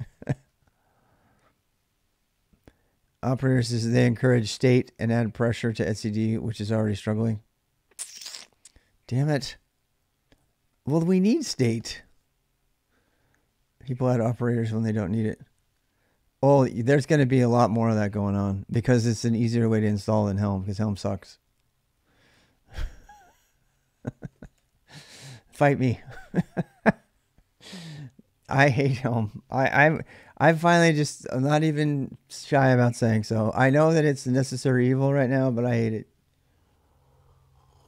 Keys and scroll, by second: 0.0-0.8 typing, 23.9-24.8 typing.